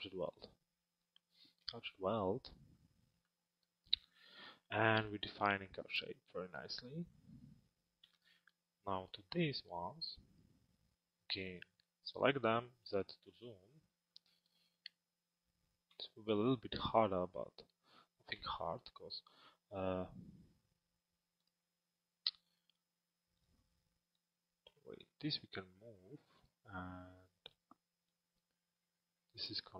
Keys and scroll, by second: 12.9 z.